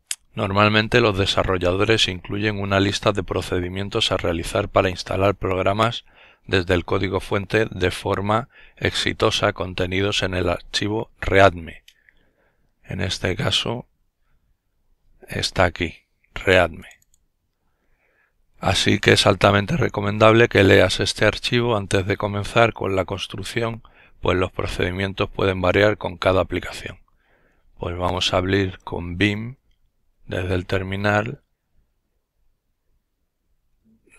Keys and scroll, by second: 26.7-28.1 typing, 32.5-34.1 typing.